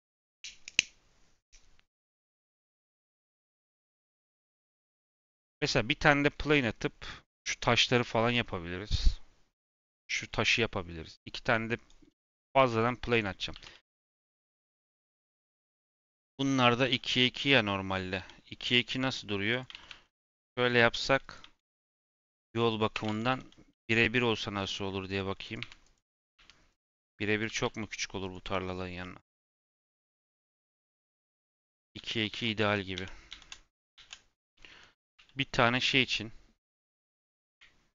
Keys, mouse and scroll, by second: 12.2 middle click, 12.5 shift+a, 13.5 g, 14.4 scroll down 4, 14.6 middle click, 15.1 g, 16.1 g, 17.7 scroll up 2, 18.1 g, 19.7 shift+d, 21.5 shift+r, 21.7 shift+r, 23.0 ctrl+z, 23.2 ctrl+z, 23.7 ctrl+z, 24.5 n, 25.4 click, 26.1 click, 27.4 g, 28.3 g, 29.3 shift+d, 31.2 x, 31.9 ctrl+z, 32.3 ctrl+z, 32.5 ctrl+z, 32.9 ctrl+z, 33.9 ctrl+z, 34.9 g.